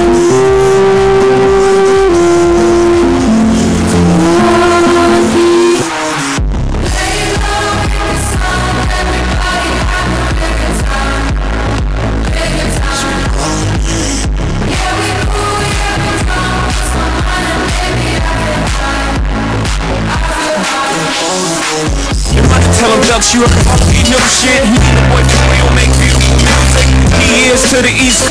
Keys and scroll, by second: 5.9 Page_Down.